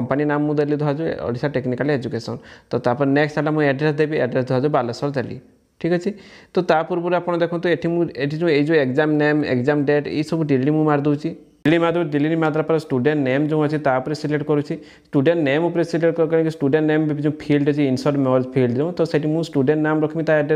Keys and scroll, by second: 10.6 shift+e.